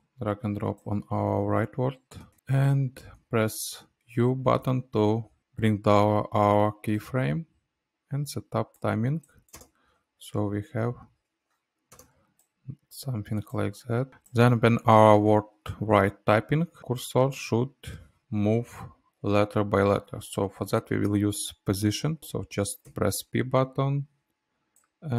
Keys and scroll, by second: 5.4 u, 10.2 space, 23.3 p.